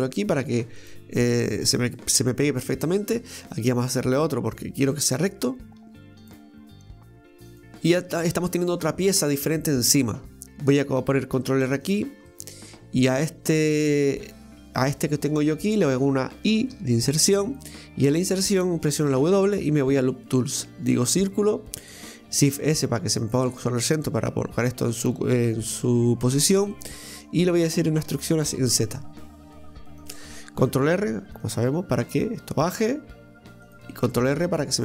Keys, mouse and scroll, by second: 1.9-3.2 middle drag, 3.2 ctrl+r, 4.9 middle click, 5.9 ctrl+r, 7.7-10.2 middle drag, 10.4 click, 12.3-13.8 middle drag, 13.8 click, 14.6 right click, 15.0 shift+right click, 15.8 shift+right click, 16.8 i, 18.0-19.1 middle drag, 19.1 w, 26.7-28.1 middle drag, 28.1 e, 31.1 ctrl+r.